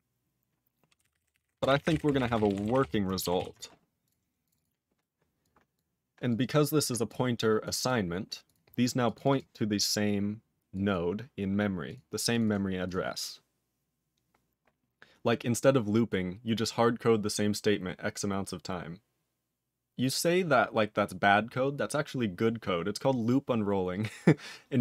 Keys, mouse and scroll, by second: 0.0-3.3 typing, 3.4 ctrl+s, 4.0 click, 4.1 click, 4.4 click, 4.5 click, 4.5 double click, 4.6 double click, 5.4 click, 5.7 click, 6.3 click, 7.1 click, 7.6 click, 7.8 click, 8.5 click, 9.0 click, 9.1 click, 9.2 double click, 9.3 click, 9.3 click, 10.7 click, 10.9 click, 11.9 click, 11.9 click, 12.3 click, 12.4 click, 12.4 double click, 12.5 double click, 12.8 click, 12.9 click.